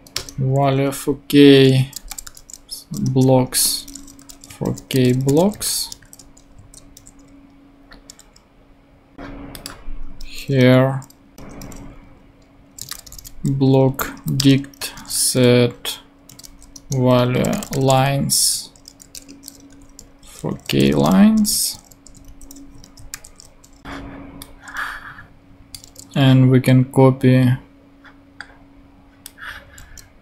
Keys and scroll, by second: 0.1 shift+Return, 1.7-2.7 typing, 3.0 Return, 3.5 Tab, 3.9-6.5 typing, 6.5 shift+super+Right, 6.9 super+;, 7.6 ;, 10.1 Return, 11.3 super+Up, 11.6-13.5 typing, 14.0 Down, 14.3 Return, 14.7-18.1 typing, 16.7 Return, 18.5 Tab, 19.4-22.2 typing, 22.8 shift+super+Right, 23.1 super+;, 25.8 super+c.